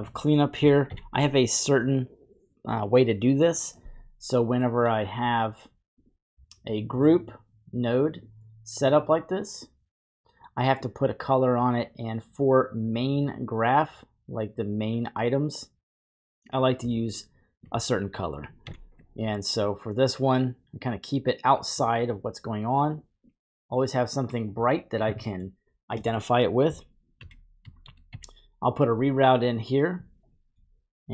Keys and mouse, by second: 0.9 ctrl+j, 7.2 click, 8.1 click, 9.1 click, 9.7 click, 10.8 click, 10.8 typing, 17.1-17.6 drag, 18.6 ctrl+j, 19.9-21.7 drag, 22.9 click, 23.2 drag, 24.1 typing, 25.3 middle click, 26.1 middle click, 27.2 shift+a, 29.4 typing.